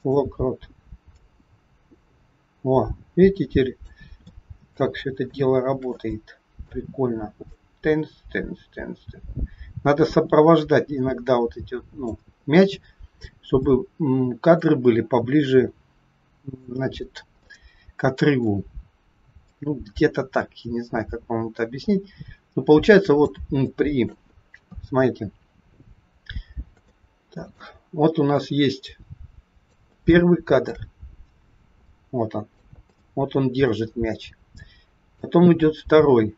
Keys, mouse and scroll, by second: 1.2 click, 4.3 shift+middle click, 4.9 scroll up 1, 5.3 shift+middle click, 6.1 middle click, 7.6 click, 13.5 middle click, 15.3 middle click, 17.3 scroll up 1, 17.4 middle click, 19.4 click, 24.1 shift+middle click, 24.5 KP_3, 26.8 shift+middle click, 28.4 click, 30.0 shift+middle click, 31.9 click, 33.0 shift+middle click, 35.0 click.